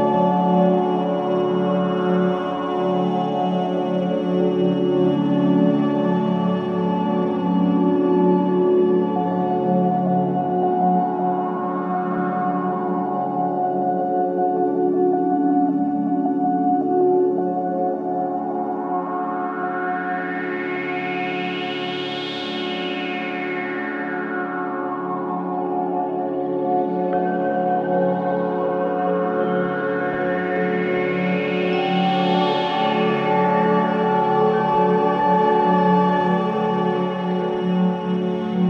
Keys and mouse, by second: 1.3-2.0 drag, 2.0 typing, 2.6-3.3 drag, 3.8-4.4 drag, 10.4-10.9 drag, 11.4-13.5 ctrl+alt+drag, 15.3 middle click, 15.4 click, 15.7 middle click, 15.8 click, 17.7 middle click, 17.8 click, 18.7 middle click, 18.8 click, 20.3-21.3 middle drag, 21.3-22.9 drag, 22.7-23.4 typing, 23.3-25.8 drag, 25.9 click, 26.2 space, 27.5 space, 28.7 click, 28.9 space, 30.7-32.2 typing, 32.2-34.8 drag, 35.9 click, 38.1 ctrl+alt+click.